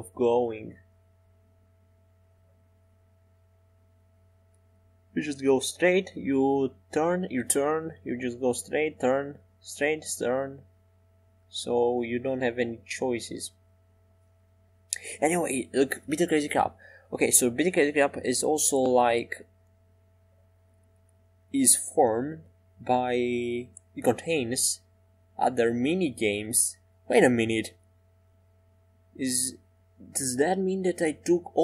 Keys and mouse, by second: 14.0-25.3 right drag, 25.4 right click, 25.4 e, 27.1 e, 28.1 Tab.